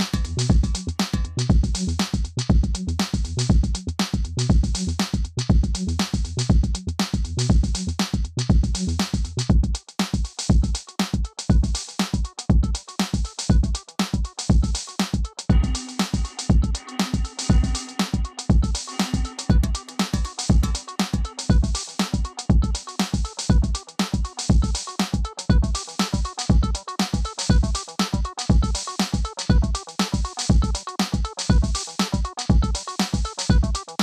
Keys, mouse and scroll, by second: 0.4 right click, 2.2-6.3 drag, 7.6 click, 8.4 ctrl+d, 9.0 click, 10.2 m, 11.6-13.3 drag, 13.3 ctrl+z, 13.8-17.0 drag, 18.5 ctrl+click, 19.1 ctrl+c, 19.6 click, 20.8 click, 22.0 typing, 23.1-26.1 drag, 26.1 ctrl+click, 26.6 ctrl+g, 27.8 click, 28.8 typing, 29.6 click, 30.4 ctrl+z, 30.8-33.7 drag, 33.7 scroll down 1.